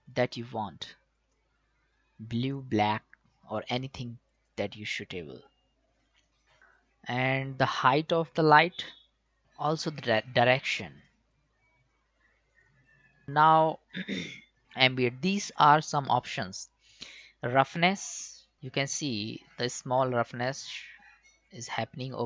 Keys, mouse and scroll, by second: 8.1 click, 8.1-11.0 drag, 11.0-13.2 drag, 18.0-22.2 drag.